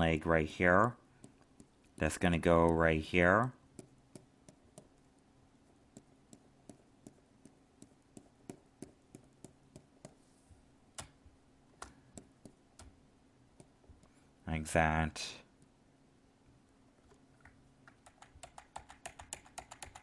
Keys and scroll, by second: 18.0 ctrl+z.